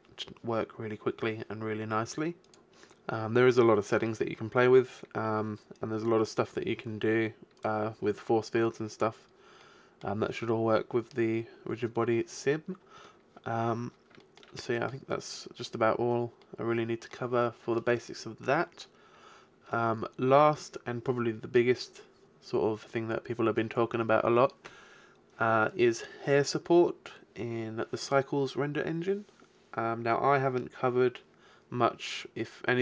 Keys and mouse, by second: 9.0-12.2 middle drag.